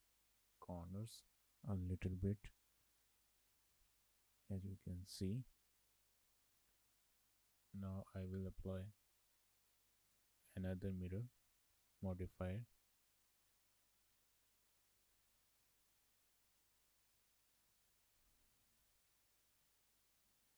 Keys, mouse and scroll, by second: 4.7 shift+middle click, 9.0 click, 11.0 click, 14.8 click, 15.9 shift+middle click, 17.2 click, 17.8 shift+middle click, 19.1 click, 19.6 scroll down 2, 19.8 shift+middle click.